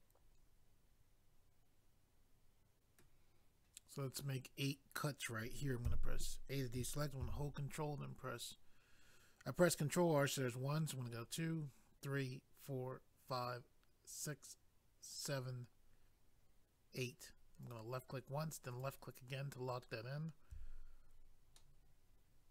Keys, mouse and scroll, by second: 4.0 scroll up 1, 5.9 a, 7.2 ctrl+r, 11.0-11.8 scroll up 1, 11.8-12.2 scroll up 1, 16.7-17.6 scroll up 1, 17.6 click, 17.7 click, 18.7 click, 18.8 click, 21.5 middle click.